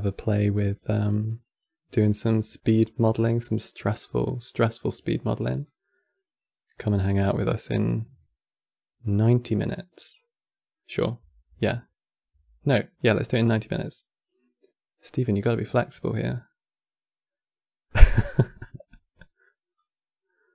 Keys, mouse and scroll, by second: 1.3-2.0 middle drag, 2.0 scroll down 3, 2.3-2.8 middle drag, 2.8 scroll down 3, 3.1-5.3 middle drag, 5.3 click, 7.2-10.4 middle drag, 13.1-16.1 middle drag, 17.6-19.4 middle drag, 19.4 click.